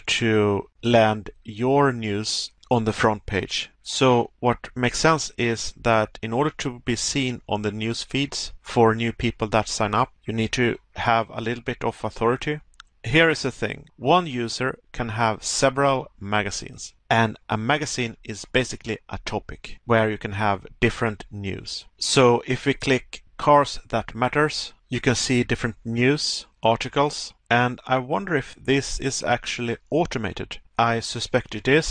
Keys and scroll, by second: 2.6 Pause, 6.8 Pause, 8.7 Pause, 15.3 Pause, 18.1 Pause, 20.4 Pause, 23.8 Pause, 30.3 Pause.